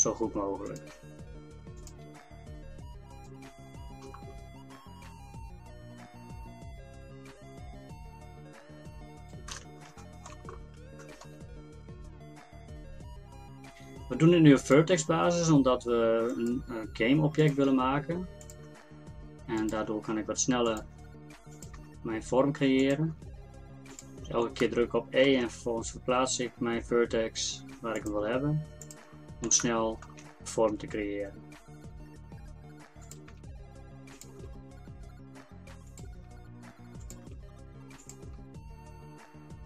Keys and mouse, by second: 1.0 e, 2.2 e, 4.1 middle click, 4.7-6.8 middle drag, 4.7 e, 10.0 click, 10.4 middle click, 10.6 click, 13.0 e, 14.9 e, 16.8 e, 17.7 e, 18.7 e, 19.8 e, 21.0 e, 21.8 e, 23.2 e, 25.9 e, 28.3 e, 30.7 e, 33.3 e, 34.4 e, 36.2 e, 37.3 e, 38.3 e.